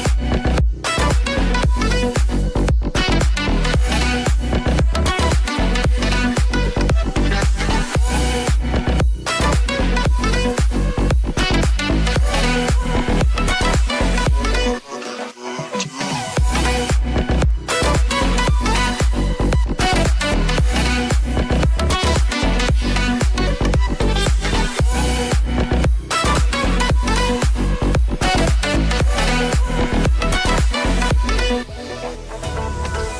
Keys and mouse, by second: 0.7 a, 0.9 i, 2.7-4.9 middle drag, 3.4 Right, 6.2 Left, 8.8 Right, 12.4 i, 12.9 space, 16.0 space, 22.4 shift+e, 24.1 space, 28.1-33.1 shift+right drag, 29.0 space, 30.1 ctrl+Tab, 30.9 click, 31.7-33.1 drag.